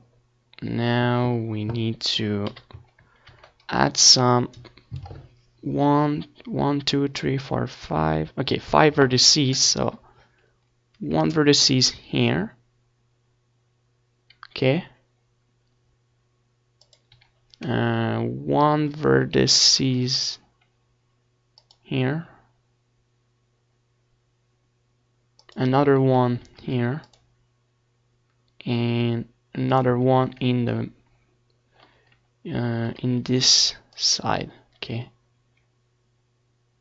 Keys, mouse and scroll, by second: 3.1 ctrl+r, 9.0-11.6 drag, 9.2 a, 11.6 ctrl+r, 17.0-18.5 drag, 17.2 a, 17.8 ctrl+r, 21.2-22.7 drag, 21.2 a, 24.0 ctrl+r, 28.6-29.8 drag, 29.5 z, 29.8 a, 30.1 c, 31.2-35.8 right drag, 31.6 c, 32.8 c, 34.8-36.4 drag, 36.5-36.8 drag.